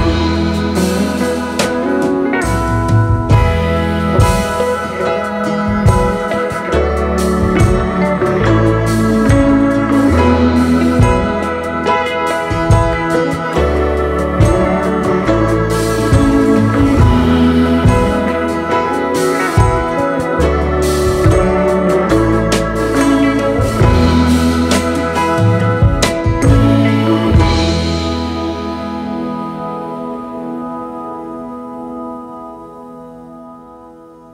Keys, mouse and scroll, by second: 1.0-1.3 alt+scroll down 3, 3.0 double click, 4.1 Delete, 5.0 alt+scroll up 3, 5.3 space, 7.1 ctrl+t, 8.1 double click, 8.3 ctrl+a, 8.6 typing, 9.0 Return, 10.3 double click, 10.5 space, 10.6 double click, 14.4 alt+scroll up 3, 16.4 alt+scroll down 1, 17.2 alt+scroll down 5, 17.6-18.6 space, 20.8 alt+scroll up 2, 21.0 space, 21.6 alt+scroll up 1, 21.6 alt+scroll down 2, 22.5 i, 23.8 alt+scroll up 2, 25.2 right click, 27.1 right click, 28.3 double click, 28.7 double click, 29.9-31.1 typing, 33.0 alt+Right, 33.6 ctrl+t.